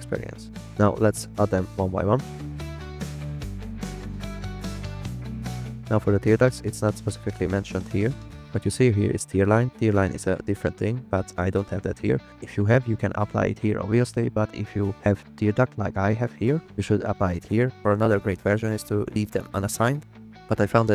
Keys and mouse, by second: 1.6 click, 3.5 click, 3.8 click, 4.4 click, 4.8 drag, 5.3 click, 5.6 click, 19.0 click.